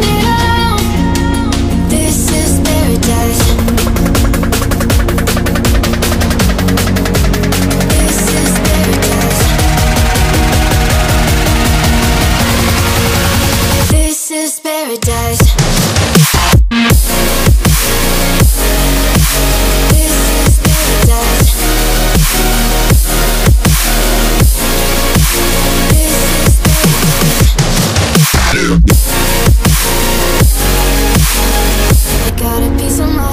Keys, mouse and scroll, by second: 6.6-8.5 drag, 11.9 click, 20.6-28.4 drag, 30.6-33.3 drag.